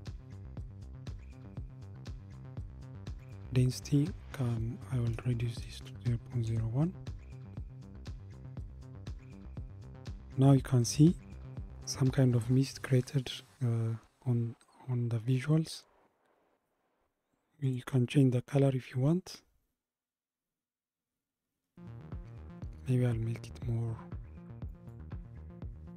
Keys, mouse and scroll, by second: 3.2-6.4 drag, 17.7 click.